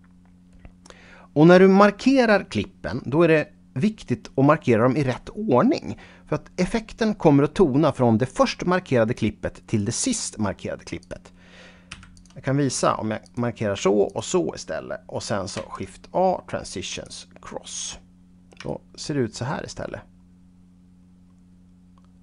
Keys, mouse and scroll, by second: 11.0 click, 11.9 x, 12.1 click, 13.2 click, 14.1 shift+click, 15.5 shift+a, 16.9 click, 19.0-22.2 shift+right drag.